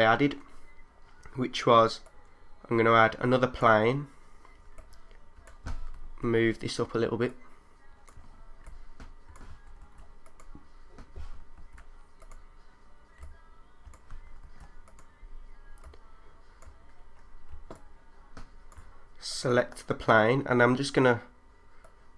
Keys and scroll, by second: 4.8 3, 6.0 super+z, 8.6 3, 9.8 super+z, 14.4 super+z.